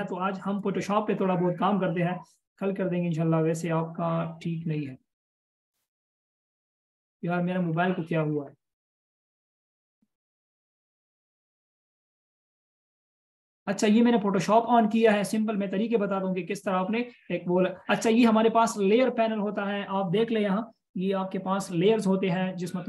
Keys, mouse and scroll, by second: 5.9 double click, 7.7-10.1 scroll down 1, 12.1-13.9 scroll up 1, 16.0 space.